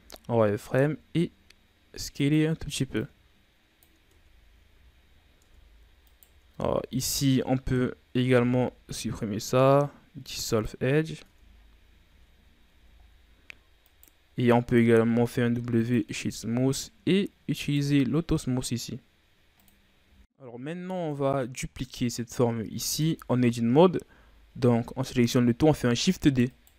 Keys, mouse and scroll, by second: 0.4 s, 2.9-4.0 drag, 4.0 Tab, 4.4-4.7 scroll down 3, 4.7 a, 5.1 scroll up 4, 5.4 Tab, 6.0 alt+right click, 7.0 alt+right click, 7.4-8.2 scroll down 6, 8.2 x, 11.2 Tab, 11.4-12.0 scroll down 7, 12.0 a, 12.4 scroll down 1, 12.6 a, 13.0-13.8 scroll up 4, 13.8 right click, 15.0 w, 17.5 click, 18.6-19.5 scroll down 3, 19.5 click, 20.0 scroll down 2, 20.4-20.9 scroll up 3, 20.9 right click, 21.8 scroll up 1, 21.9-22.8 scroll down 4, 22.8 Tab, 24.0 a, 24.3 a, 24.6 a, 25.9 shift+d.